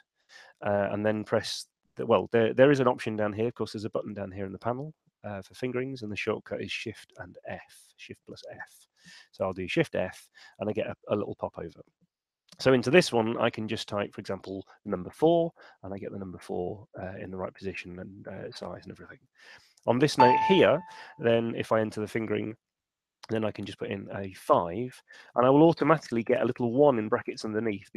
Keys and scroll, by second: 9.6 shift+f, 14.3 4, 14.8 Return, 22.3 shift+f, 23.7 5, 24.5 Return.